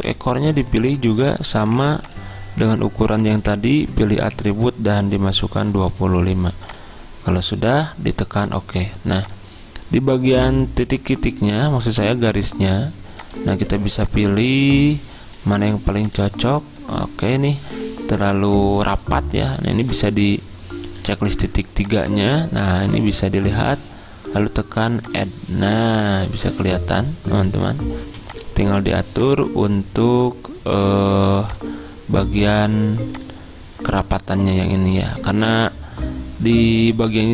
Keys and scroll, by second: 5.5 typing.